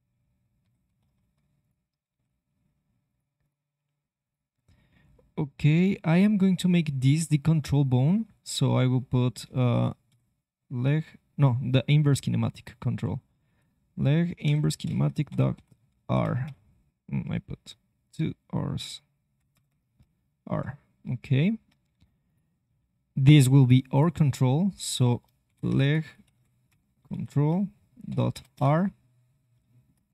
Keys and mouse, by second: 0.1 e, 0.6 click, 1.0 ctrl+z, 2.1 e, 18.0-20.4 drag, 19.6 BackSpace, 21.4 click, 22.6 e, 29.3-30.1 middle drag.